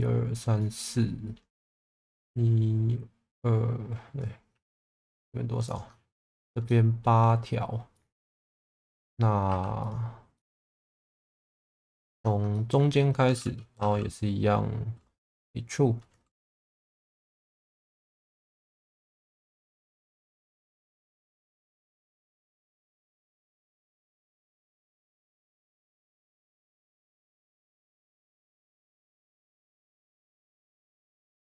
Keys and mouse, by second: 0.6 middle click, 2.0 middle click, 4.5 2, 4.7 click, 6.7 middle click, 7.9 middle click, 8.7 shift+middle click, 9.5 2, 9.8 click, 10.4 middle click, 12.1 ctrl+click, 12.5 middle click, 15.3 e, 16.7 x, 17.9 click, 18.4 shift+middle click, 19.5 g, 19.7 b, 21.3 middle click, 22.7 middle click, 24.2 1, 24.8 g, 24.9 b, 27.8 click, 28.3 middle click, 30.0 g, 30.1 b.